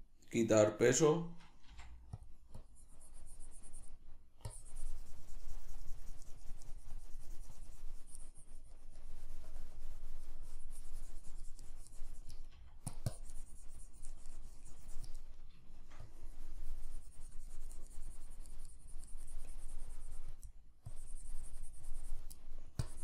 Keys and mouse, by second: 1.7 f, 4.1 middle click, 4.5-12.9 drag, 15.3 middle click, 16.1-20.5 drag, 20.5 middle click, 20.9-22.4 drag, 22.4 middle click, 22.8 click.